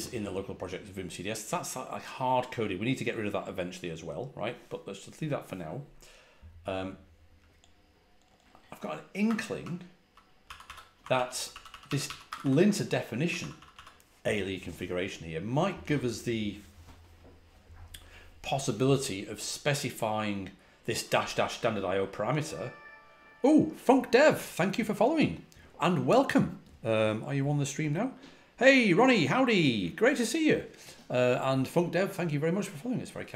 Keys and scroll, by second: 9.1-13.6 typing.